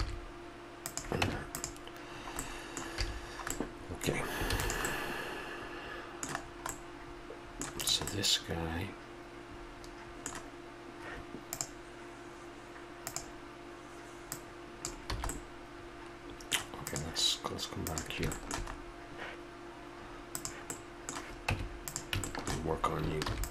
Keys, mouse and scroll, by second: 0.0 s, 1.2 Tab, 2.2 drag, 2.5 middle click, 2.6 click, 3.1 a, 3.9-4.9 middle drag, 4.5 ctrl+s, 8.2-8.5 middle drag, 8.7-9.8 middle drag, 14.3-15.3 drag, 15.2 a, 15.3 middle drag, 15.5-15.9 drag, 15.9-16.4 middle drag, 18.2-18.5 middle drag, 18.8-20.3 middle drag, 20.3 click, 20.7 middle click, 21.5 Tab, 23.3 ctrl+r.